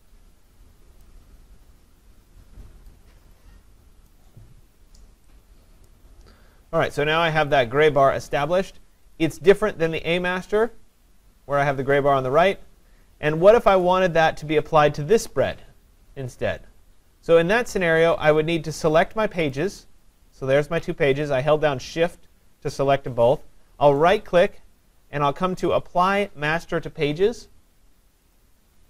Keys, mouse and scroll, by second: 1.0 click, 4.1 click, 5.9 click, 9.2 click, 10.0 click, 13.9 click, 19.6 shift+click, 20.3 shift+click, 24.1 right click, 28.4 click.